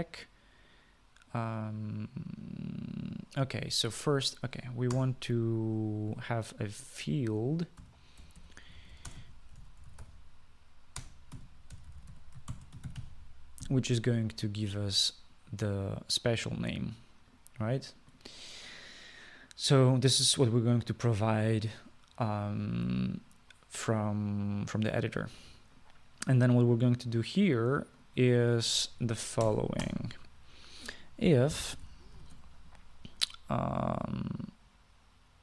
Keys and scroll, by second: 6.1 Return, 8.7-14.8 typing, 30.6 Tab, 31.0 Tab, 32.5-33.3 typing.